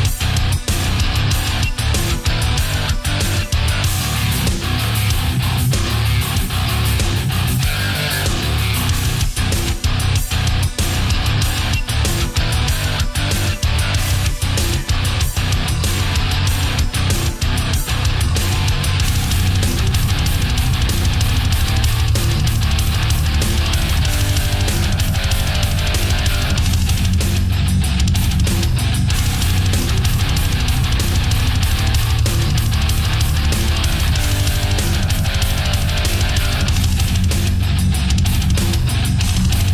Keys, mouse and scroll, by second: 1.9-3.4 middle drag, 3.5 scroll down 1, 4.0 middle click, 4.5 a, 9.2 b, 9.7 click, 11.4-16.6 drag, 17.3 space, 19.8 k, 20.0 n, 21.3 click, 23.0 click, 29.8 shift+click, 30.7 Return, 33.0 click, 34.0 a, 36.5 right click, 37.3 shift+right click, 38.8-39.7 drag.